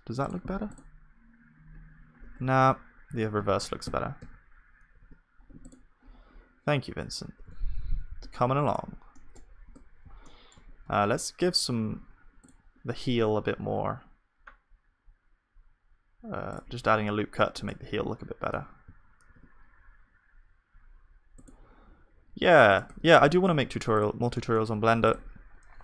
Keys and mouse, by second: 2.3 right click, 2.8-4.9 ctrl+z, 2.8-4.9 middle drag, 4.9 ctrl+s, 5.4 middle click, 7.6 ctrl+s, 9.1-10.9 drag, 9.1-13.0 middle drag, 9.1-10.3 right drag, 9.7 Tab, 11.8 ctrl+r, 17.4 Tab, 17.9 ctrl+r, 18.5 Tab, 19.3 ctrl+r, 22.9 Tab, 23.2 middle click, 23.5 ctrl+s, 24.4-25.8 drag.